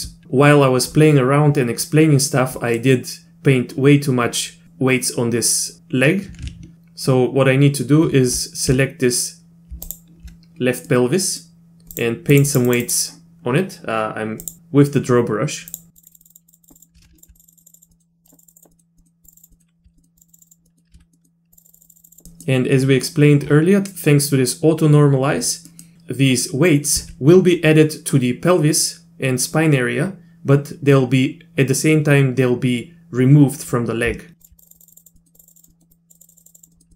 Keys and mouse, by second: 2.6 middle click, 9.9 ctrl+click, 10.9 middle click, 11.9 click, 12.3 click, 12.5 click, 12.7 click, 12.8 click, 14.5 click, 15.7 click, 15.9 click, 16.0 click, 16.1 click, 16.2 click, 16.3 click, 16.5 click, 16.6 click, 16.7 click, 16.8 click, 17.2 ctrl+click, 17.3 click, 17.4 click, 17.5 click, 17.6 click, 17.8 click, 17.9 middle click, 18.2 click, 18.3 click, 18.4 click, 18.7 middle click, 19.0 middle click, 19.2 click, 19.3 click, 19.5 middle click, 20.0 middle click, 20.2 click, 20.3 click, 20.4 click, 20.5 click, 20.7 middle click, 20.9 z, 21.1 middle click, 21.5 click, 21.6 click, 21.7 click, 21.8 click, 21.8 click, 21.9 click, 22.0 click, 22.1 click, 22.1 click, 22.3 middle click, 25.7 middle click, 34.4 ctrl+click, 34.6 click, 34.7 click, 34.8 click, 34.9 click, 35.0 click, 35.2 middle click, 35.4 click, 35.4 click, 35.5 click, 35.7 middle click, 35.9 click, 36.2 click, 36.2 click, 36.3 click, 36.4 click, 36.5 click, 36.7 middle click, 36.9 middle click.